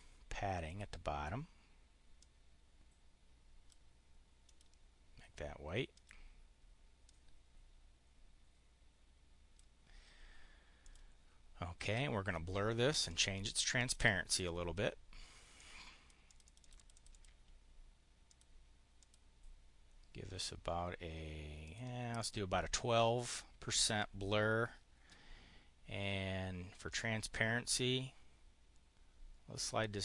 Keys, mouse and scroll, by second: 0.5 click, 2.0-3.6 drag, 4.3 click, 5.8 click, 6.9-9.5 drag, 10.6 click, 11.6 click, 12.9-14.0 drag, 15.4 click, 16.1 click, 16.4 click, 16.8 click, 18.2 click, 18.9 click, 21.5 click, 22.0 click, 26.8-30.0 drag.